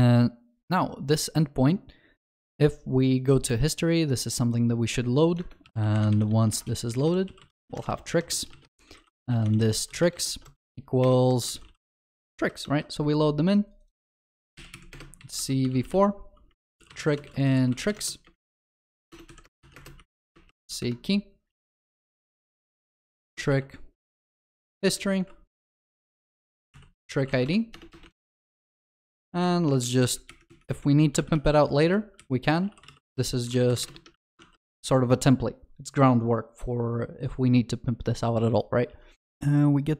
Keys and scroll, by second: 12.4 ctrl+alt+shift+l, 14.6 ctrl+s, 34.1 ctrl+alt+shift+l, 35.9 ctrl+s, 39.2 ctrl+s.